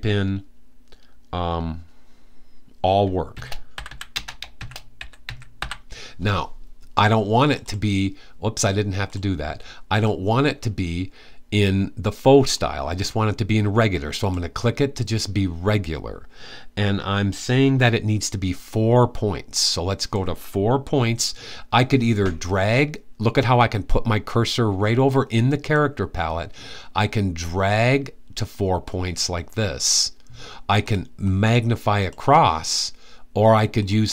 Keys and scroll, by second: 2.8-5.8 typing.